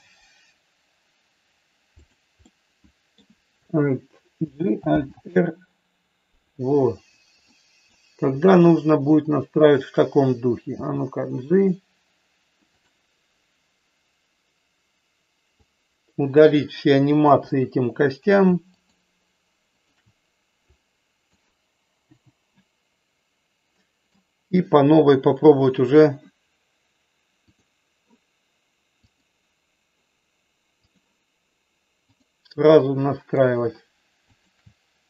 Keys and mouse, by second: 2.5 middle click, 4.4 alt+g, 4.9 alt+r, 7.5 middle click, 10.7 g, 15.6 click, 17.4 Delete, 18.6 shift+click, 20.6 click, 22.0 Delete, 23.7 middle click, 27.5 click, 30.9 click, 32.7 middle click, 34.4 shift+click.